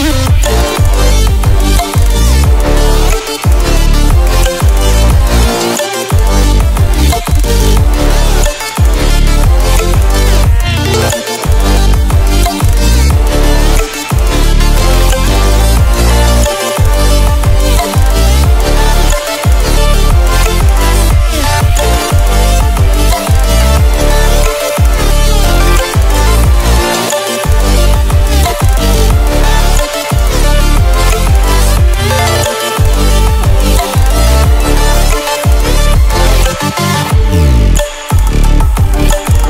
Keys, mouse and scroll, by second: 3.2 right click, 4.8 click, 5.4-6.1 typing, 7.9 click, 8.0-8.7 typing, 10.2-10.9 typing, 12.6-22.1 drag, 22.1 ctrl+alt+scroll up 1, 23.4-27.2 drag, 27.0 ctrl+alt+scroll down 1, 29.0 click, 30.0 space, 30.3 click, 30.5 space, 30.9 space, 31.8 click, 36.0-39.4 drag.